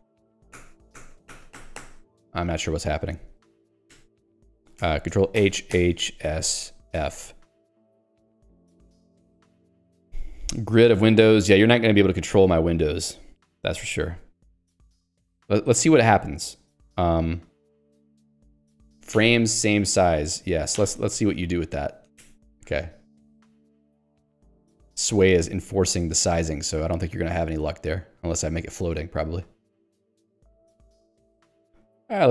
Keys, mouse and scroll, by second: 0.6 0, 2.0 0, 4.0 ctrl+g, 4.8 ctrl+g, 6.3 s, 7.0 f, 18.7 BackSpace, 19.2 =, 20.8 y, 22.2 ctrl+g, 22.7 f, 29.8 ctrl+g.